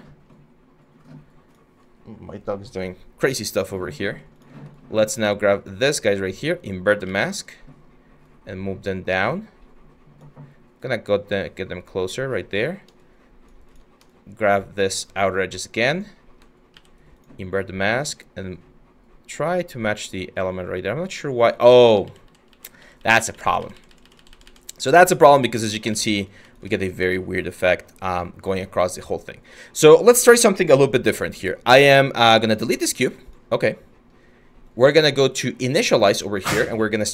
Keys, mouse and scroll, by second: 6.7 ctrl+z, 16.4 ctrl+z, 21.7 ctrl+z, 25.0 ctrl+z.